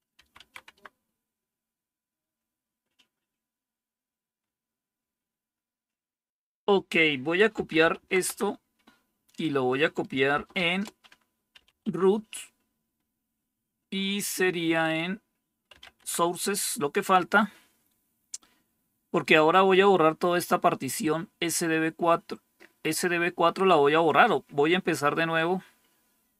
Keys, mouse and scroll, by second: 0.0-0.6 typing, 7.2-8.4 typing, 10.3-12.1 typing, 15.5-16.2 typing.